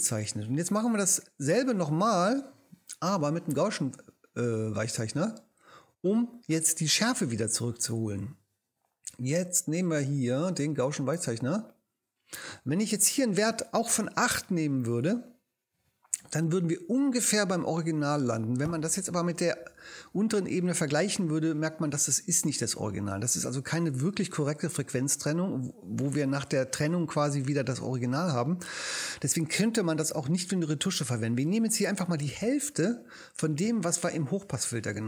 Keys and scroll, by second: 15.0 8, 32.8 4.